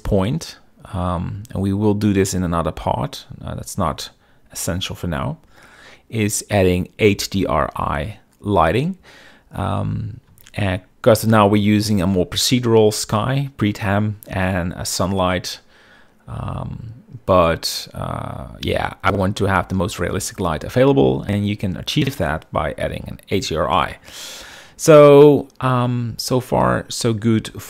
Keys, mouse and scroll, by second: 11.0 z, 12.6 click.